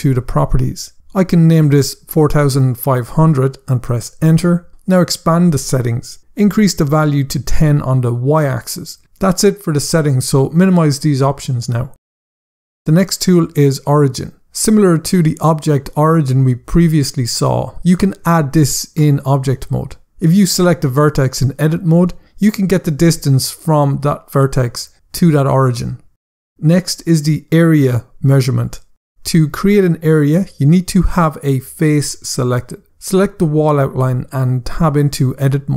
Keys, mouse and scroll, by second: 1.0 click, 2.1-2.7 typing, 3.1 Return, 5.3 click, 7.3 click, 7.5-8.0 typing, 8.3 Return, 10.8 click, 31.0 scroll down 1, 32.7 click, 33.8 Tab, 35.6 click.